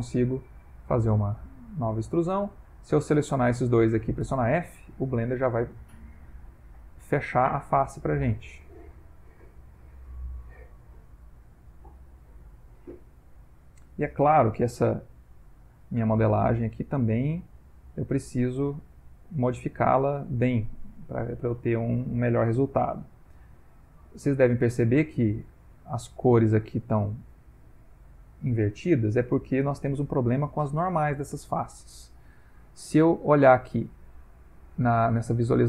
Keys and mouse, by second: 0.3 e, 1.5 shift+click, 1.9 shift+click, 2.6 click, 3.2 shift+click, 4.3 f, 5.1 click, 5.3 g, 6.5 click, 6.7 g, 8.4 click, 8.6 g, 9.4 click, 9.6 g, 11.0 ctrl+middle click, 11.6 middle click, 12.8 middle click, 13.4 ctrl+middle click, 13.5 ctrl+middle click, 15.1 click, 15.3 g, 16.9 click, 17.0 g, 18.3 click, 18.5 g, 20.3 ctrl+middle click, 21.0 shift+middle click, 23.3 middle click, 24.8 Tab, 25.4 ctrl+middle click, 25.6 ctrl+middle click, 25.9 middle click, 27.0 middle click, 29.0 ctrl+middle click, 29.7 ctrl+middle click, 30.8 middle click, 31.3 Tab, 33.4 click, 35.3 click.